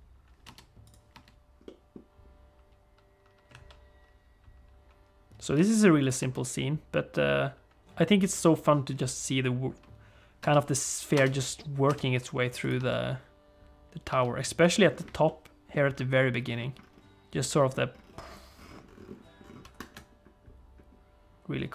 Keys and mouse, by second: 0.6 space, 0.9 click, 1.1 space, 1.6 middle click, 3.5 alt+a, 5.5 space, 6.0 click, 6.2 space, 10.4 space, 11.1 space, 11.8 space, 12.7 space, 14.1 space, 14.6 click, 15.2 click.